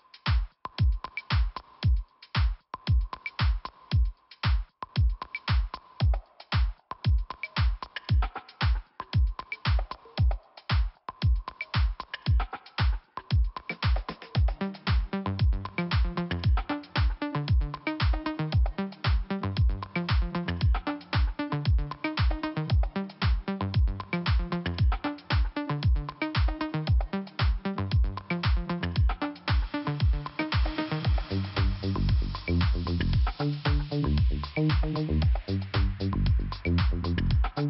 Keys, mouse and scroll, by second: 2.7 click, 3.7 click, 5.8 click, 5.8 click, 6.3 click, 8.9 click, 9.3 click, 10.5 double click, 10.6 double click, 11.0 click, 13.0 click, 13.3 click, 13.4 double click, 13.8 double click, 15.2 click, 15.3 click, 15.7 click, 17.6 click, 17.7 click, 18.0 click, 19.2 scroll down 1, 21.3 click, 22.9 middle click, 24.1 click, 25.4 scroll up 1, 26.4 click, 26.5 click, 29.6 click, 31.3-31.9 scroll down 3, 32.7 click, 34.9 scroll down 1.